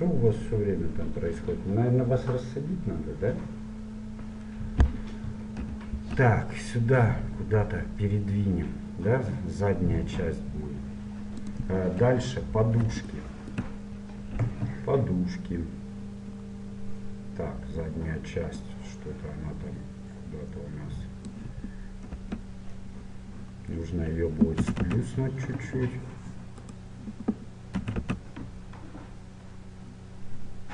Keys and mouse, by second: 5.7 g, 12.1 KP_1, 13.2-15.3 drag, 16.6-18.7 middle drag, 18.7-20.5 drag, 22.1 KP_3, 23.6-25.6 middle drag, 24.7 a, 24.9 z, 26.7-27.8 right drag, 27.8 click, 27.8 s.